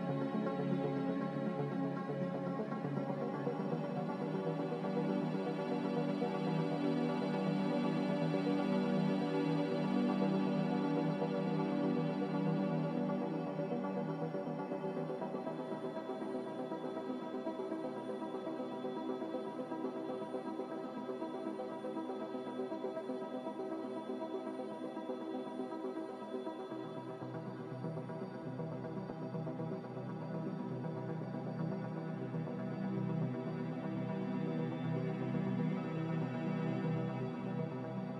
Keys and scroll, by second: 4.0 b, 6.5 z, 9.6-10.5 typing, 14.4-15.1 typing, 28.9-29.7 typing, 37.7 z.